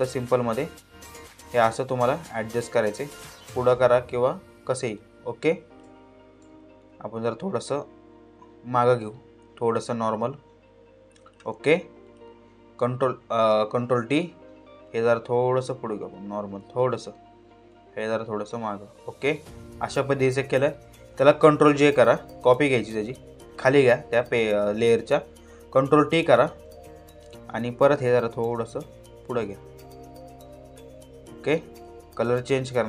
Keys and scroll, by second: 13.5 ctrl+t, 21.3 ctrl+j, 25.3 ctrl+t.